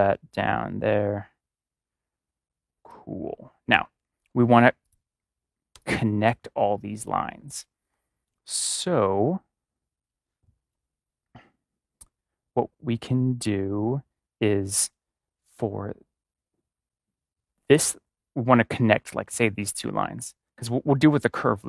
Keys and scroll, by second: 5.7 space, 6.2 space.